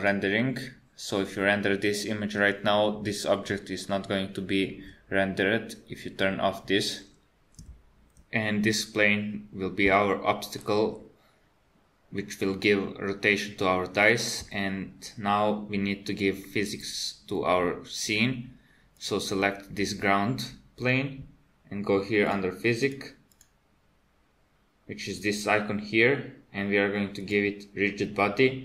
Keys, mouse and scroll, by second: 0.1 click, 19.0 click, 22.3 click, 22.8 click, 23.3 click, 27.2 click.